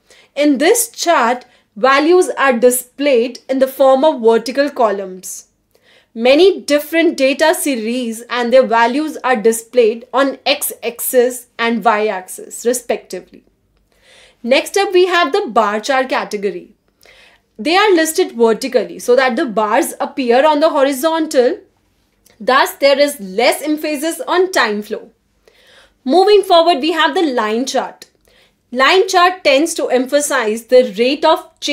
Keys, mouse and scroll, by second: 0.0-1.2 typing, 2.1-2.4 scroll up 1, 2.5-5.3 typing, 6.6 scroll up 1, 15.6-16.4 drag, 16.7 click, 17.1 click, 17.8 click, 18.0 click, 18.4 click, 18.8 click, 19.1 click, 19.3 click, 19.4-21.8 typing, 20.6 click, 22.2 click, 22.6 click, 23.3 click, 24.9 click, 25.7 click, 26.9 click, 27.7 click, 28.2 click, 28.7 click, 29.1 click, 29.5 click, 29.6-31.7 typing.